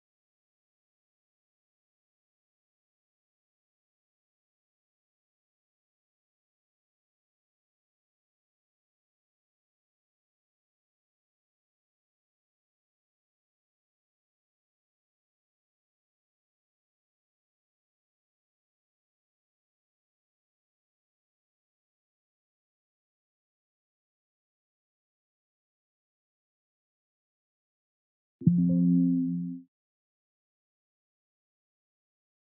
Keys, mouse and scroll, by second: 7.0 click, 15.2 click.